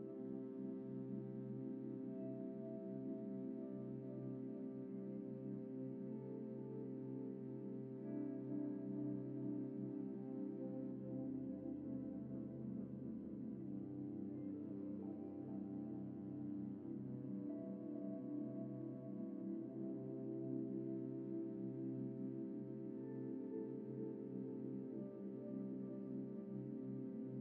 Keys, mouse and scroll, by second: 0.3-0.7 scroll up 1, 0.7-1.3 scroll down 1, 1.3 typing, 2.5 Tab, 2.9 typing, 3.4 F4, 3.8 middle click, 4.5 alt+a, 5.0 middle click, 10.4 middle click, 11.7 shift+middle click, 12.0-12.5 shift+scroll down 1, 18.4 typing, 19.4-20.1 typing, 20.5 Return, 21.4 typing, 23.9-24.7 typing, 25.3 Escape, 26.0-26.5 scroll down 1, 26.5-27.3 scroll up 1.